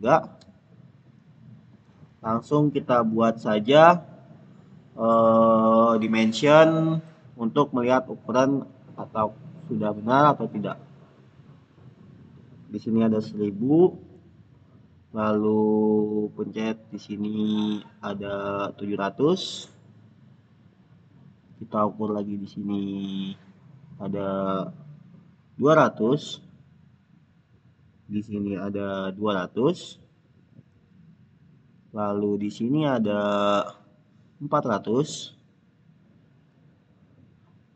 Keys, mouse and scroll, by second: 0.3 Return, 2.2 click, 4.2 click, 8.0 click, 10.1 click, 16.0 click, 17.0 click, 18.3 click, 22.4 click, 25.0 click.